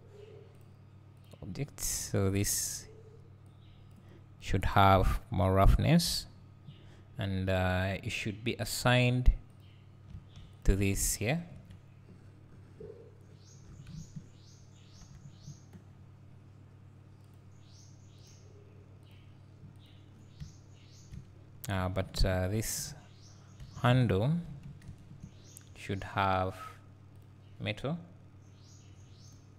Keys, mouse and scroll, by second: 4.9-9.8 drag, 10.2 Tab, 10.6 click, 11.6 KP_Decimal, 12.2 scroll down 1, 12.8 `, 13.6 right click, 15.0 ctrl+l, 17.4-22.4 drag, 21.9 2, 23.7 3, 24.2 alt+click, 25.0 ctrl+KP_Add, 26.1 click, 27.3 click.